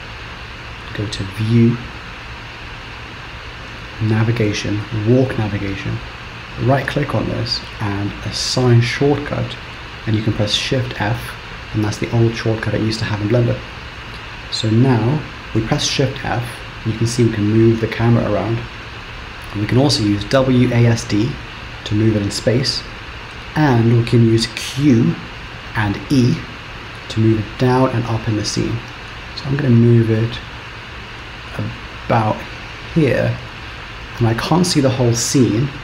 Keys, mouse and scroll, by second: 1.3 click, 15.8 shift+f.